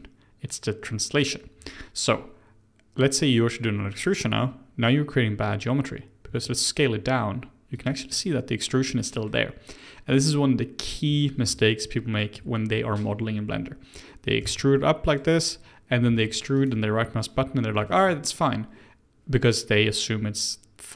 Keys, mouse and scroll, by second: 6.2 s, 8.1-11.1 middle drag, 11.7-14.4 scroll up 1, 14.4 e, 16.0 e, 17.8-20.9 shift+middle drag.